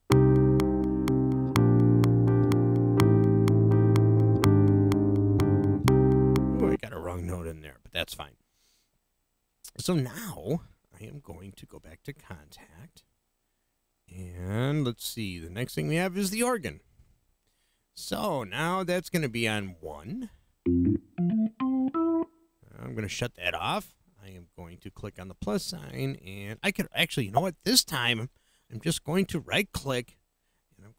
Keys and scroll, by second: 6.7 space.